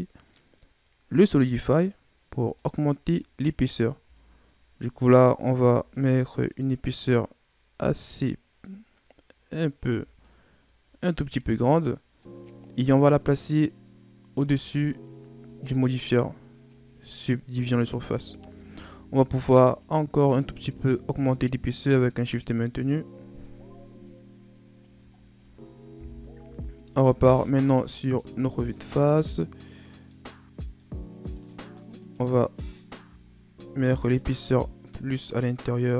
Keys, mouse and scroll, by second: 2.5-3.6 middle drag, 3.6-4.1 scroll up 4, 5.5-8.5 drag, 10.1-13.1 middle drag, 13.1 click, 14.3-16.6 drag, 17.2-17.9 middle drag, 17.9-18.3 scroll up 1, 19.6-23.6 drag, 25.0-25.7 scroll down 1, 25.8 KP_1, 26.3 a, 27.3-27.8 scroll up 4, 27.8 middle click, 28.1-28.6 scroll up 2, 28.6-31.9 middle drag, 31.9 right click, 32.9-35.9 drag.